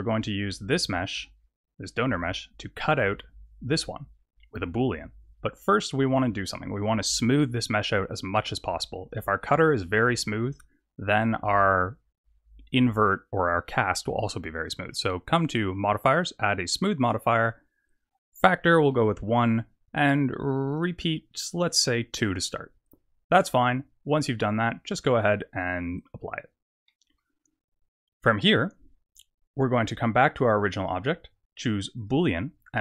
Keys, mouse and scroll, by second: 0.6 click, 2.8 click, 5.5 click, 8.9 click, 18.0 click, 21.2 click, 25.9 click, 26.8 middle click, 28.4 click, 30.9 click.